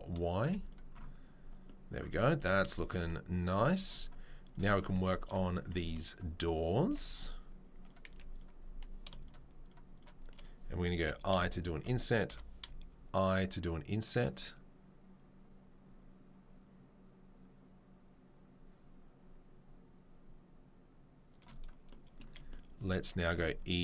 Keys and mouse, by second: 0.4 s, 0.4 z, 2.3 Tab, 4.4 click, 4.5-7.8 middle drag, 4.9 Tab, 7.8 Tab, 7.8 click, 7.9-9.9 middle drag, 8.1 z, 9.9 right click, 10.0-23.8 middle drag, 11.0 i, 21.3 shift+right click, 23.4 e.